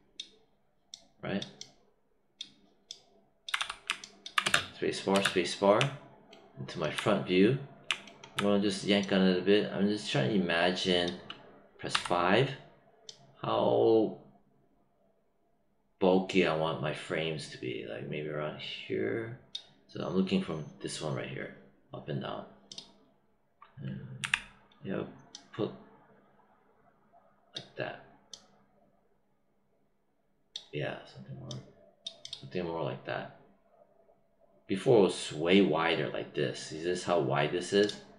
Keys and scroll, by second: 3.5 w, 4.3 space, 11.8 5, 24.1 z.